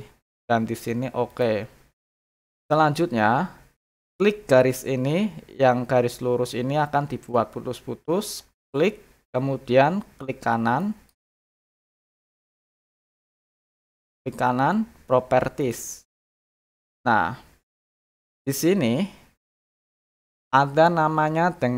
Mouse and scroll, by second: 1.3 click, 8.5 click, 10.8 right click, 11.8 right click, 12.6 click, 13.1 click, 13.5 click, 13.9 right click, 15.6 click.